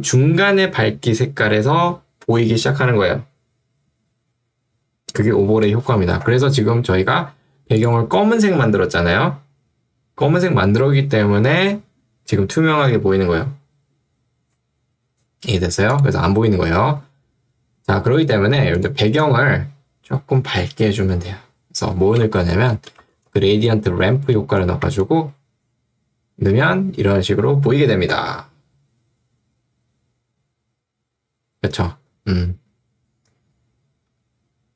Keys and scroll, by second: 22.2 ctrl+space, 22.6-23.9 typing, 25.1 Return.